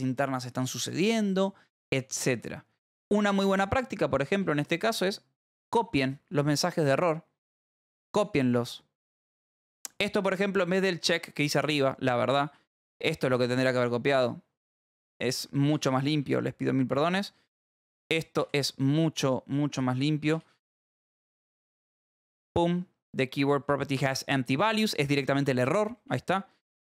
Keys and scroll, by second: 2.7 Escape, 4.4 j, 5.7 l, 9.1 k, 9.9 j, 11.0-13.4 typing, 14.7-16.9 typing, 18.4 v, 20.3-23.9 typing, 25.4 j, 26.4 h.